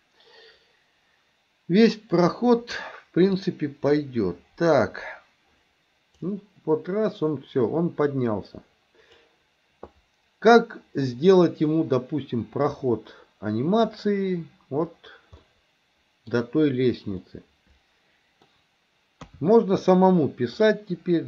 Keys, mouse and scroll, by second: 6.3-9.3 drag, 10.0-14.0 drag, 15.4-16.4 middle drag, 17.3-18.5 middle drag, 19.2 KP_3, 19.9-20.6 middle drag.